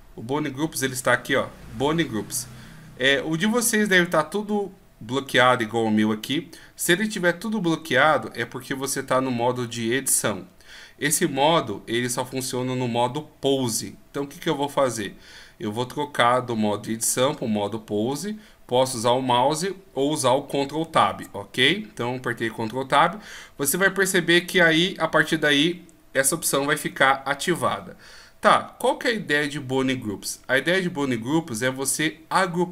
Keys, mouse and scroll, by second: 0.4-2.3 scroll down 6, 21.1 ctrl+Tab.